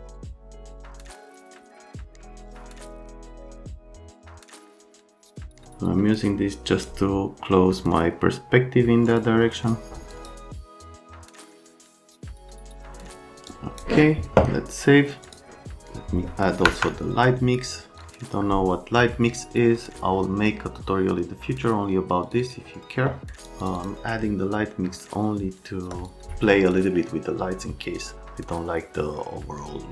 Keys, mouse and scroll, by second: 0.5 F3, 0.9 F3, 2.5 F3, 2.6 F3, 2.7 click, 3.1 click, 3.2 click, 3.3 click, 4.2 click, 4.4 click, 4.7 click, 5.5 click, 9.0 click, 9.6 click, 10.1 middle click, 10.6 middle click, 11.6 middle click, 12.0 middle click, 12.1 right click, 12.3 middle click, 13.5 middle click, 15.2 click, 15.8 click, 16.6 F10, 18.0 click, 19.7 click, 22.2 click, 22.4 click, 23.3 click, 23.6 click, 23.7 click, 25.9 click.